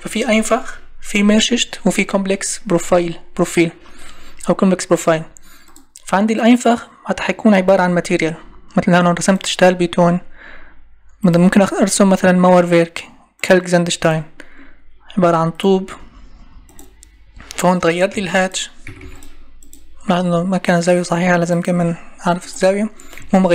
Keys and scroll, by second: 18.2 Escape, 23.2 Escape.